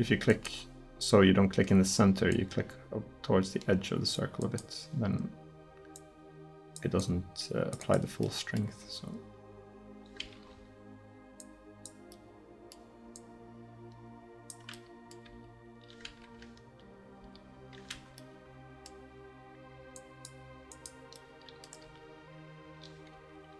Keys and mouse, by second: 2.4-4.1 drag, 4.5-5.4 drag, 5.5-9.9 drag, 8.9 r, 10.5-11.4 middle drag, 11.4-12.2 drag, 14.8-15.3 middle drag, 15.3 r, 17.2 r, 18.2-18.6 middle drag, 20.0-20.6 drag, 20.7 click, 21.3 click, 21.7 drag, 21.9 r.